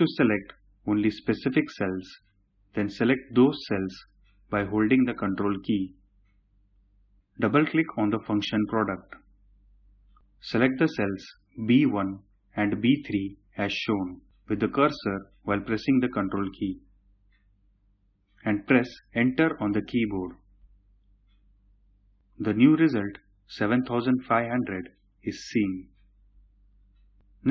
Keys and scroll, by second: 19.2 Return.